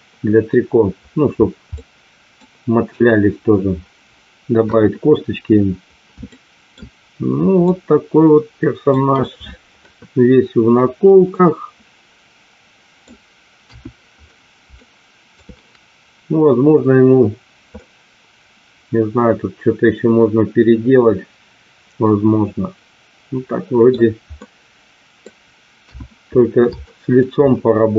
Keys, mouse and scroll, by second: 1.7-2.3 middle drag, 4.6 KP_1, 6.2-6.7 shift+middle drag, 7.7-8.8 middle drag, 11.3-12.9 middle drag, 13.7 KP_1, 14.8-15.3 shift+middle drag, 17.7-20.3 middle drag, 20.4-23.8 middle drag, 24.4-25.2 middle drag, 25.8 KP_1, 26.8 middle click.